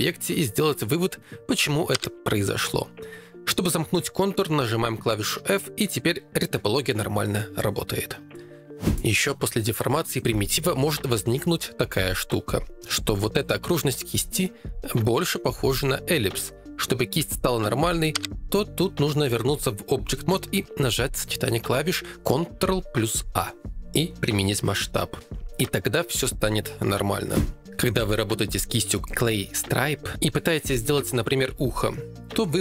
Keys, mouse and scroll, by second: 1.9 f, 2.9 ctrl+Tab, 5.8 ctrl+r, 9.2 ctrl+Tab, 10.4 ctrl+Tab, 16.8 ctrl+Tab, 18.2 ctrl+a.